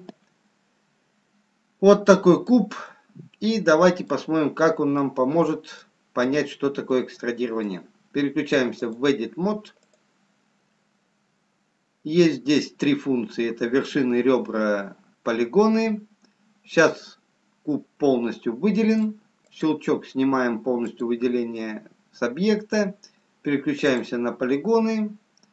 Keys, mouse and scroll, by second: 1.7 scroll up 1, 3.0 middle click, 5.1 middle click, 5.1-5.9 scroll up 1, 6.6 scroll down 3, 7.8 middle click, 11.0 click, 16.1-17.9 scroll up 2, 17.9 middle click, 21.9 click, 24.7 click, 24.7 scroll down 3.